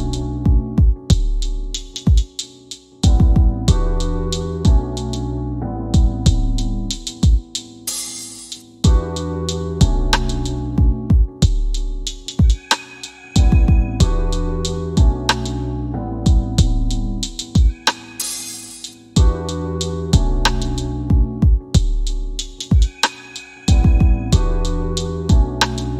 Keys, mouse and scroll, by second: 0.9-1.6 scroll up 1, 1.6 click, 9.4 KP_1, 15.1 click.